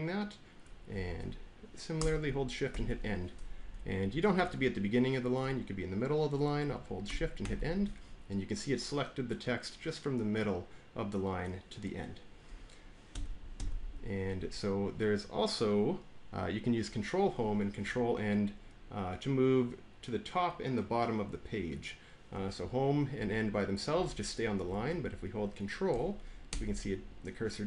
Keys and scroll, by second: 2.6 End, 3.5 Left, 3.6 Left, 4.1 Right, 4.3-5.3 Right, 7.3 End, 13.0 Down, 13.5 Down, 23.0 Home, 23.8 End, 24.3 Home, 24.6 End, 26.4 ctrl+Home.